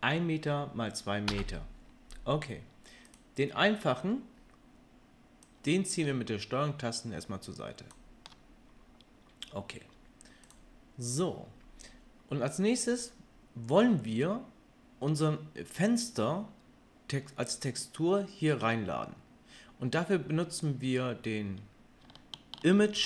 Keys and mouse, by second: 3.1-5.6 middle drag, 5.6-10.5 drag, 10.5-23.0 middle drag.